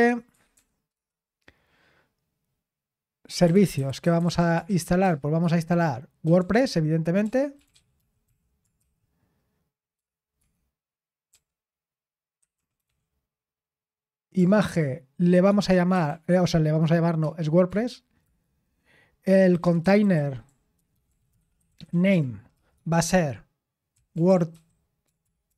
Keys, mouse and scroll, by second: 0.0-1.4 typing, 3.1-13.4 typing, 14.7-18.3 typing, 19.3-25.5 typing.